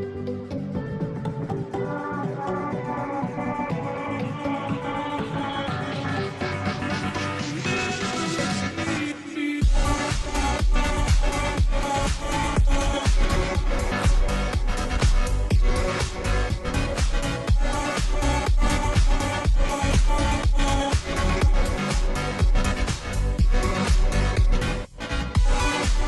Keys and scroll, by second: 15.6-16.2 space.